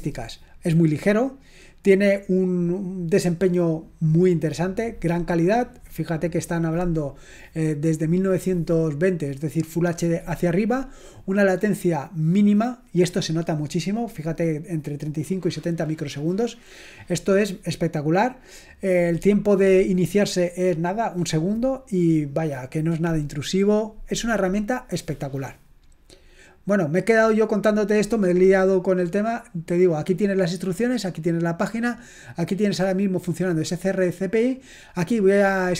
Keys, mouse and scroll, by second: 29.9 click, 34.4 click.